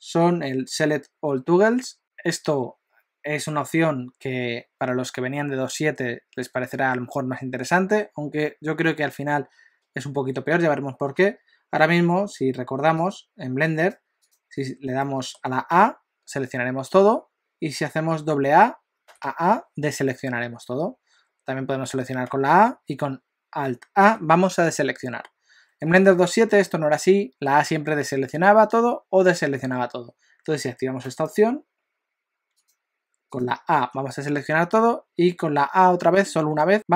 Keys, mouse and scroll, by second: 15.1 shift+middle click, 15.8 a, 19.1 a, 19.3 a, 22.4 a, 24.1 alt+a, 33.8 a.